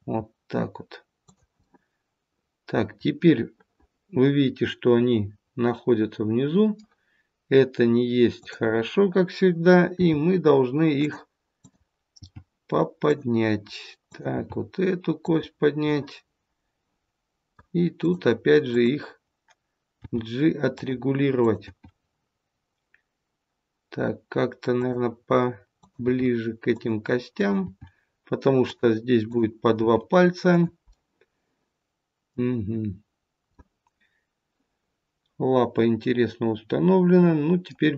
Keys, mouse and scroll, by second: 1.6 middle click, 8.3 click, 9.8 g, 11.5 click, 12.1 g, 14.0 click, 14.3 g, 15.8 middle click, 17.9 click, 18.6 click, 19.8 g, 21.3 click, 21.6 g, 25.7 click, 26.0 g, 27.3 click, 27.7 g, 29.2 click, 29.8 g, 30.8 middle click, 33.5 middle click.